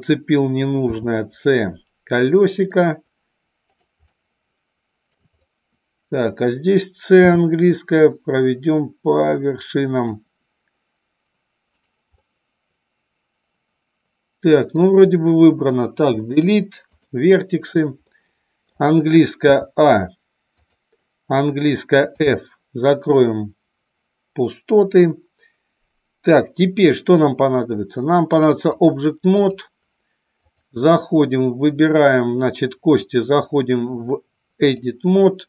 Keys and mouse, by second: 0.7 c, 4.1-5.1 middle drag, 5.3 middle click, 7.2 c, 11.7 right click, 12.2-14.7 middle drag, 16.1 Delete, 18.1 middle click, 19.5 a, 20.6 click, 22.1 f, 28.4-29.6 drag, 30.5 click, 33.0-34.7 drag.